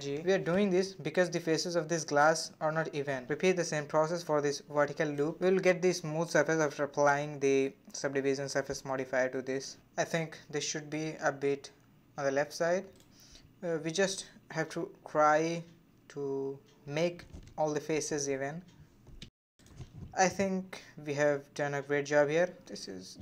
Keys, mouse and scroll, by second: 1.1 alt+click, 2.2 c, 5.3 g, 6.5 alt+click, 7.1 g, 10.2 alt+click, 12.0 shift+click, 13.5 g, 16.1 alt+click, 16.5 g, 17.5 alt+click, 18.0 g, 20.3 click, 20.5 space, 21.5 shift+click, 22.9 g.